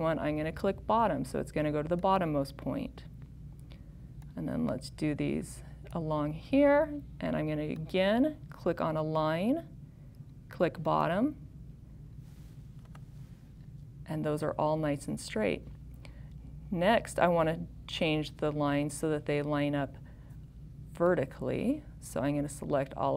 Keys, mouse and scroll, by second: 4.8 click.